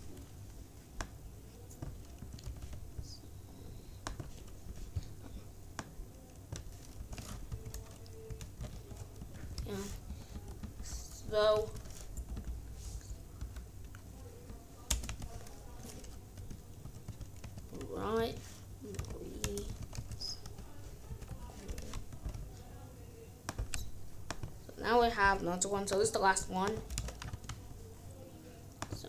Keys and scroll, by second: 1.9-3.1 typing, 4.6 k, 6.9-10.0 typing, 10.0 Left, 10.7 Left, 11.2 BackSpace, 11.6 b, 12.1 Right, 14.8 space, 15.1 p, 16.7-21.0 typing, 18.9 Return, 21.6 Return, 22.0 ctrl+s, 26.9 Return, 27.3 ctrl+v.